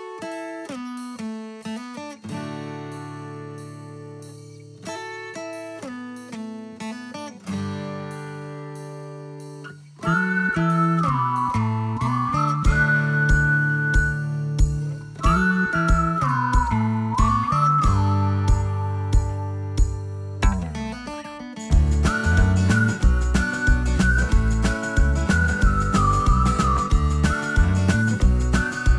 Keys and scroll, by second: 2.6-3.3 typing, 25.2-28.9 typing.